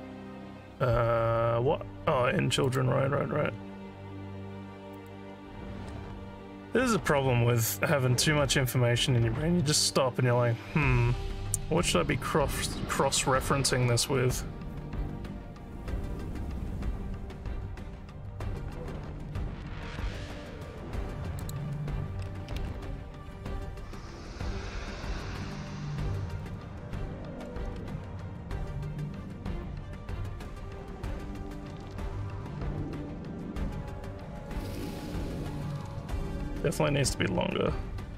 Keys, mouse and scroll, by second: 2.6 click, 3.3 scroll down 1, 5.0 click, 21.4 click, 26.4 click, 29.6-30.7 alt+drag, 32.3 click, 34.9-38.1 alt+drag.